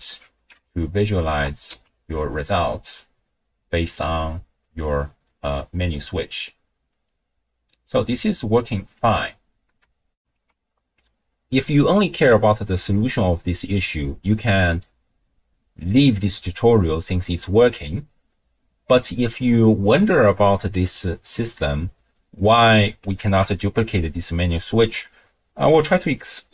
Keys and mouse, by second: 0.7 ctrl+shift+drag, 1.2 ctrl+shift+click, 1.7 z, 4.0-4.8 drag, 6.5 click, 8.3 click, 9.0 x, 10.2 ctrl+alt+shift+w, 10.2 ctrl+alt+shift+q, 22.7 click, 23.2 ctrl+shift+d.